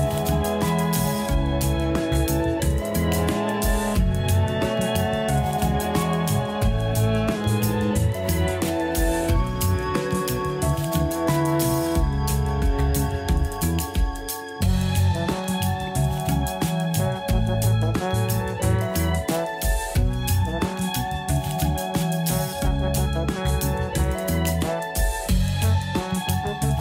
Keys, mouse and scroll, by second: 0.5 click, 5.5 click, 6.6 a, 6.8 a, 7.2-8.2 scroll down 5, 8.2-8.8 shift+middle drag, 8.8 scroll up 3, 10.6 scroll down 2, 11.2-12.8 shift+middle drag, 12.8 click, 14.2-15.5 scroll down 6, 15.5-16.3 shift+middle drag, 16.3-18.2 scroll up 2, 18.2 click, 20.5 click, 23.4-24.5 drag, 24.9-26.8 drag.